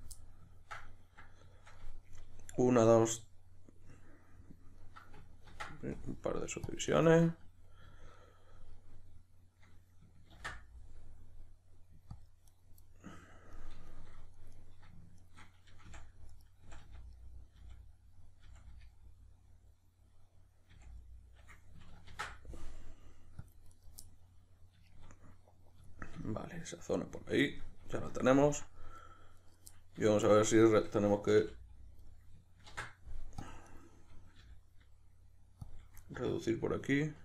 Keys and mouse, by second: 0.0 click, 0.2-14.6 middle drag, 5.5 ctrl+r, 7.0 right click, 10.4 ctrl+r, 12.6 right click, 14.6 right drag, 15.2 shift+right click, 15.9 f, 16.3 right click, 16.6 f, 17.2-29.3 middle drag, 17.6 f, 18.4 f, 20.7 f, 22.1 ctrl+r, 23.8 right click, 29.3 right click, 29.7-30.6 middle drag, 30.6 shift+right click, 31.4 f, 32.1-33.8 middle drag, 32.7 ctrl+r, 33.8 right click, 34.4 g, 35.7 click, 36.0-37.2 middle drag.